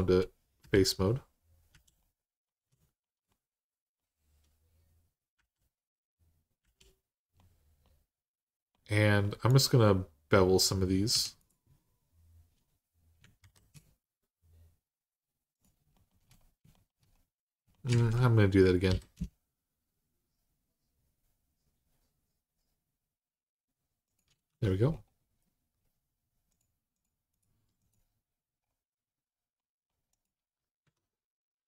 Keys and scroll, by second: 0.4 i, 1.5 i, 5.1 i, 6.4 i, 10.9 2, 13.2 ctrl+b, 17.7 ctrl+z, 18.7 ctrl+b, 24.3 Tab, 30.6 Tab.